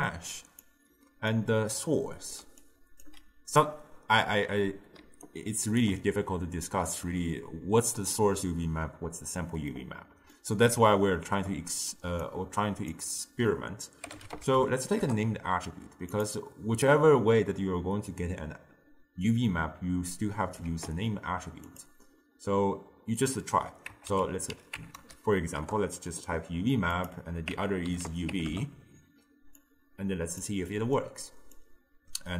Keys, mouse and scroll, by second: 0.7 click, 2.5 d, 2.7-3.1 drag, 3.1 d, 3.2 d, 3.9 d, 5.1 d, 5.3 right click, 5.9 d, 5.9 d, 9.7-12.3 middle drag, 12.3 click, 20.2 click, 20.7 shift+d, 23.2-26.3 drag, 27.0-29.7 drag, 30.7-31.6 middle drag, 31.6 drag.